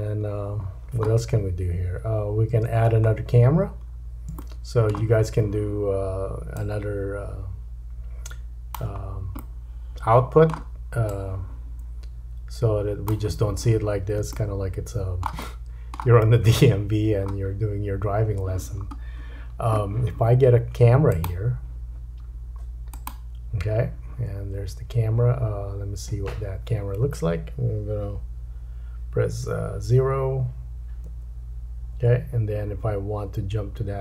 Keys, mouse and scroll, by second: 0.7-2.6 scroll down 4, 2.6 space, 3.1-3.9 scroll up 3, 3.9-4.4 scroll down 3, 4.4 shift+middle click, 6.6 click, 9.3 middle click, 11.1 click, 14.3 shift+middle click, 15.4 middle click, 16.9-17.3 scroll up 1, 21.1 click, 31.1 KP_0, 31.8 KP_0, 33.3-34.0 scroll up 2.